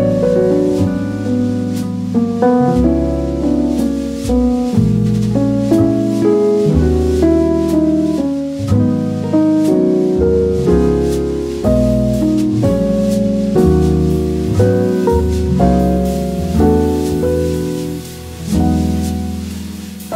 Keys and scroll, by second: 0.5 e, 6.9 shift+super+z, 14.9 v, 15.1 super+0.